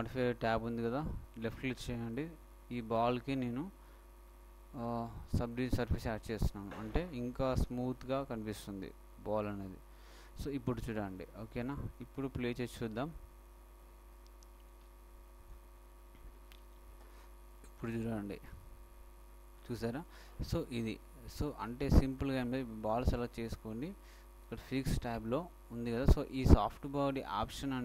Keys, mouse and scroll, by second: 1.0-2.7 drag, 5.1-6.9 drag, 10.7 middle click, 11.1 shift+click, 14.4 ctrl+middle click, 16.8 alt+a, 17.6 right click, 23.0-24.8 right drag, 25.4-27.2 drag, 27.4-27.8 middle drag.